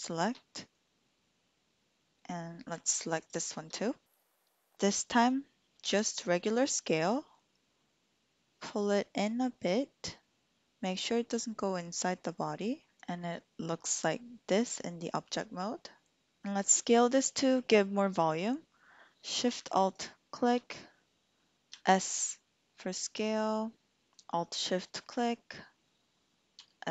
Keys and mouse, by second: 5.9 s, 13.0 Tab, 13.2 click, 14.4-15.4 drag, 15.4 middle click, 20.0 alt+shift+click, 21.7 s, 24.1 ctrl+alt+shift+z, 26.6 s.